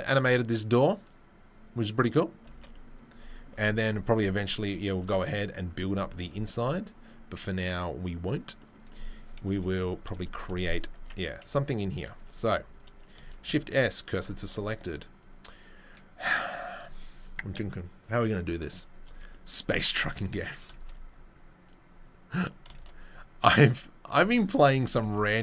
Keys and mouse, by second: 2.5 shift+space, 4.1-5.0 shift+middle drag, 5.0 right click, 5.9-6.2 shift+middle drag, 9.5 Delete, 10.0-25.4 middle drag, 10.9 Tab, 12.1 2, 12.4 3, 13.3 shift+s, 14.4 Tab, 20.7 shift+a, 22.7 shift+a, 24.7 Tab, 25.0 s.